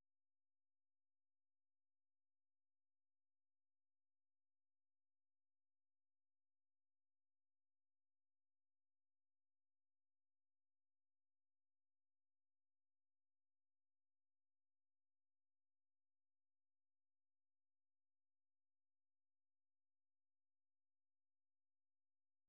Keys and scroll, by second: 5.1 alt+Tab, 7.8-10.8 typing.